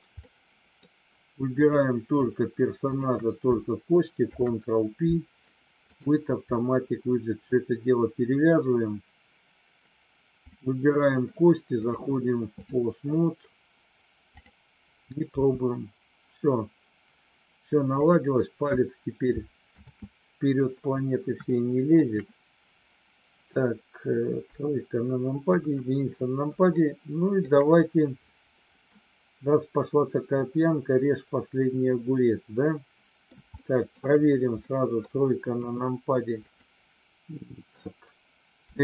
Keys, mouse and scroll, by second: 0.2 middle click, 1.5 click, 2.9 shift+click, 4.2 ctrl+p, 11.7-12.7 drag, 14.5 click, 15.2 g, 17.9 click, 19.8 ctrl+z, 21.5 middle click, 24.5 KP_3, 25.5 KP_1, 26.7 shift+middle click, 28.8-33.2 middle drag, 33.5 shift+middle click, 34.6 middle click, 35.6 KP_3, 36.5 click, 38.7 r.